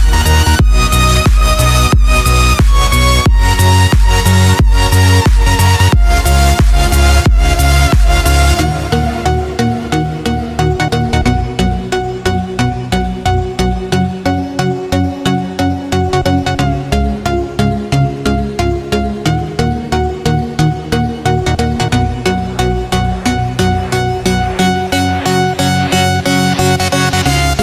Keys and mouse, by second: 0.4-4.5 middle drag, 5.5-6.8 drag, 8.2-9.5 drag, 10.4-11.3 shift+drag, 11.9-12.8 drag, 13.2-13.9 drag, 14.6-15.3 drag, 16.0-17.0 drag, 17.8 click, 19.2 click, 20.5 click, 22.0 click, 23.3 click, 26.7 click, 27.3 click.